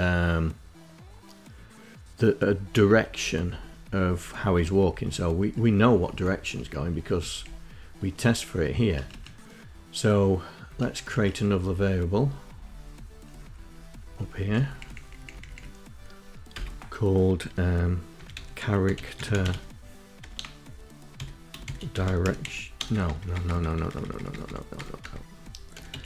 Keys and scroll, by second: 1.2 Up, 1.4 Up, 1.6 Up, 1.8 Up, 1.9 Up, 2.0 Up, 2.3 Down, 2.5 Down, 2.7 Down, 3.0 Down, 3.3 Down, 3.6 Down, 3.7 Down, 3.9 Up, 4.2 Up, 4.4 Up, 4.5 Up, 4.7 Up, 5.0 Up, 5.2 Up, 5.3 Up, 5.5 Up, 5.8 Up, 6.1 Up, 6.2 Down, 7.4 Down, 7.7 Up, 9.5 Up, 9.7 Up, 9.8 Up, 10.1 Up, 10.4 Up, 10.7 Up, 10.9 Up, 11.0 Up, 11.3 Up, 11.6 Up, 11.8 Up, 11.9 Up, 12.2 Up, 12.4 Up, 12.6 Up, 12.9 Up, 13.1 Up, 13.4 Down, 13.7 Down, 14.4 Down, 15.3 Return, 16.7-26.0 typing.